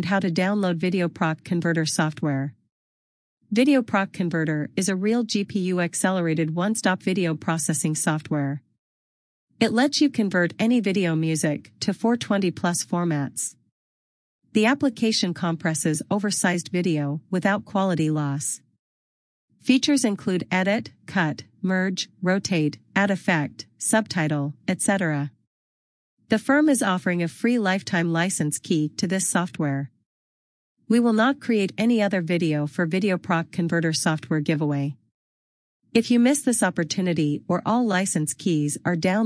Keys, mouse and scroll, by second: 6.0 click, 11.5 click, 12.2 click, 15.4 click, 17.7 click, 19.3 click.